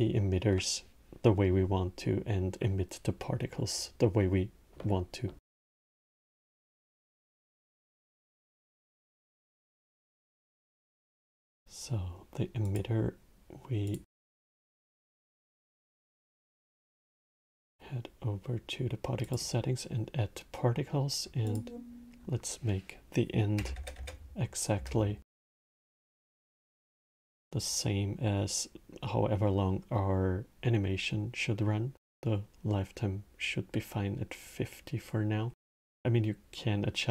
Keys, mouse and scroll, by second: 9.0 t, 12.3 click, 13.6-16.7 drag, 18.9-23.6 drag, 23.6 KP_0.